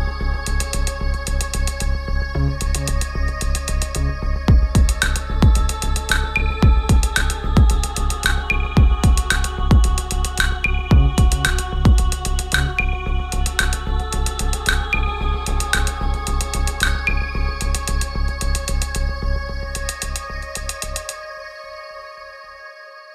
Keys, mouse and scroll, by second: 10.0 right click, 11.1 click, 14.7 BackSpace, 16.9 click, 20.2 click, 23.0-23.1 drag.